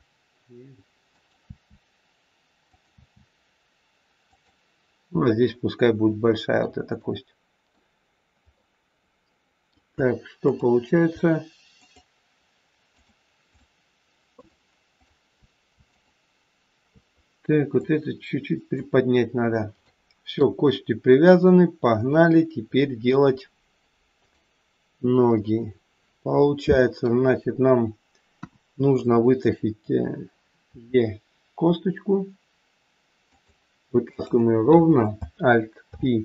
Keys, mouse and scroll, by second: 1.4 e, 2.8 e, 5.5 middle click, 6.8 middle click, 8.1-8.6 scroll down 1, 8.6 middle click, 10.4 click, 11.8 shift+click, 13.5 shift+click, 17.8 click, 18.8 click, 19.4-20.0 scroll down 3, 19.7 shift+middle click, 22.3 middle click, 23.2-24.1 scroll up 3, 24.1 click, 25.3 middle click, 28.2 KP_1, 30.7 e, 34.0 click, 35.8 alt+p.